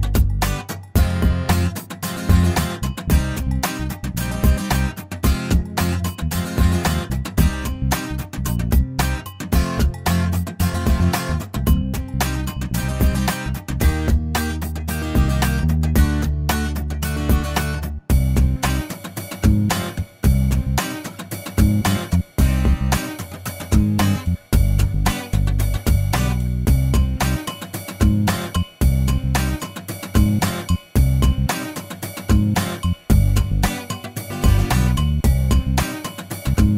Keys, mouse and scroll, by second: 0.3 middle click, 2.5 click, 3.8 click, 5.8 shift+o, 6.7 shift+middle click, 7.8 middle click, 9.4-11.1 drag, 11.3 middle click, 13.1 middle click, 13.3 scroll down 1, 13.6 middle click, 14.6-16.0 middle drag, 16.4 l, 17.8 click, 26.7 middle click, 29.4 click, 30.0 right click, 31.1-33.3 drag, 34.1-35.8 middle drag, 35.8-36.7 scroll up 1.